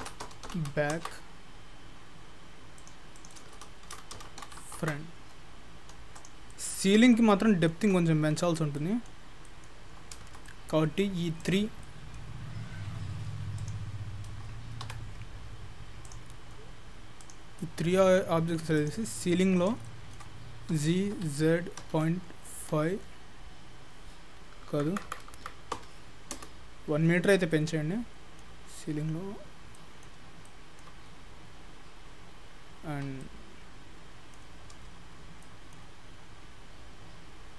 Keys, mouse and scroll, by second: 2.8 click, 3.2 click, 3.3 click, 5.8-6.2 scroll up 3, 6.2 click, 6.5 middle click, 6.9 scroll up 2, 7.1 shift+middle click, 8.8 middle click, 10.5 middle click, 11.4 shift+click, 11.8 shift+middle click, 14.9 Tab, 15.4-16.1 scroll down 3, 16.1 click, 17.2 shift+click, 17.6 shift+middle click, 18.8 shift+click, 19.3 shift+middle click, 19.6 scroll up 2, 19.9 shift+middle click, 20.8 g, 27.2-27.6 scroll up 2, 27.6 middle click, 28.5 scroll down 1, 28.7-29.2 scroll up 3, 29.2-29.8 scroll down 2, 29.8 middle click, 29.8-30.1 scroll down 2, 30.5 shift+middle click, 33.1 scroll down 1, 33.3 shift+middle click, 34.9-35.5 scroll up 2, 35.5 middle click, 35.5-37.3 scroll up 6.